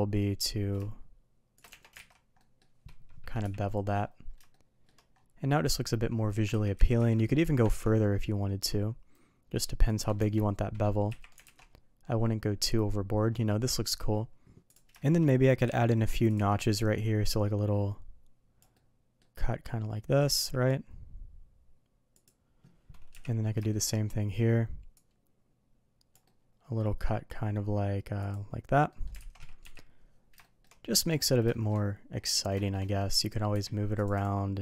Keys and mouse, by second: 1.6 Tab, 1.9 alt+a, 2.3 middle drag, 3.4 KP_3, 4.5-4.8 shift+middle drag, 6.5 ctrl+z, 7.2 middle drag, 7.6 ctrl+b, 10.1 Tab, 11.0 KP_3, 11.4 alt+a, 14.9 shift+middle drag, 15.6 d, 17.2-22.3 drag, 18.7-22.3 middle drag, 23.1 KP_3, 23.7 shift+middle click, 24.9-28.4 drag, 26.3-28.4 middle drag, 28.8 middle drag, 29.1 alt+a, 29.6 KP_3, 30.4 shift+middle drag, 31.5 shift+middle drag, 32.5 shift+middle drag, 33.5 q.